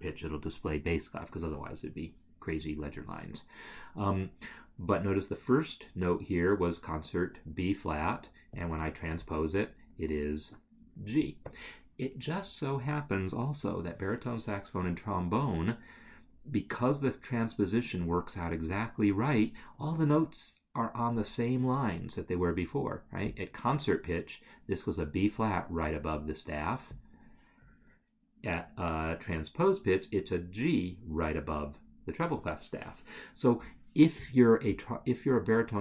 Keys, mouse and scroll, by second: 8.5 click, 23.3 click, 26.9 click.